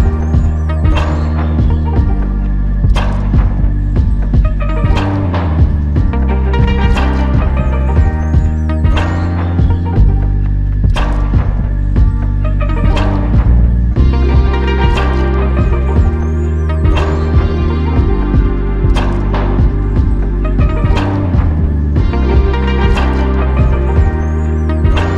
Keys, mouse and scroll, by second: 3.5 alt+click, 7.2 alt+shift+click, 7.8 ctrl+alt+click, 9.4 alt+click, 11.4 alt+click, 15.7 alt+click, 24.4 alt+click.